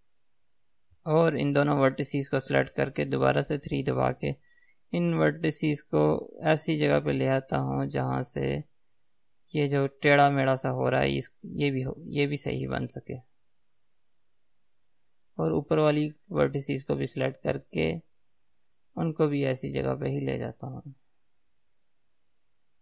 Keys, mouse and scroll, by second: 0.8 scroll up 2, 1.0 click, 2.3 shift+click, 3.3 KP_3, 5.6 g, 11.7 click, 14.1-17.8 middle drag, 17.8 click, 21.4 KP_3.